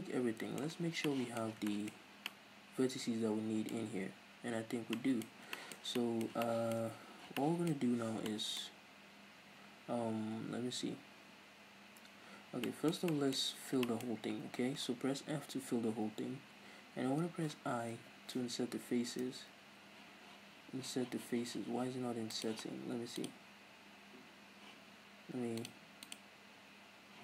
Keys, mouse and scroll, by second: 0.7 scroll down 2, 1.9-2.2 scroll up 2, 3.6-4.7 scroll up 2, 4.7 scroll down 2, 5.2 scroll up 2, 5.4 scroll down 2, 5.5-6.6 shift+middle drag, 6.7-18.0 middle drag, 7.1 scroll down 2, 9.3-11.3 scroll up 2, 11.3-12.3 scroll up 1, 12.3 scroll down 2, 13.4-15.3 scroll up 4, 15.3 f, 16.1-18.0 scroll up 2, 22.4 click, 23.1-24.6 drag, 25.6-27.2 drag.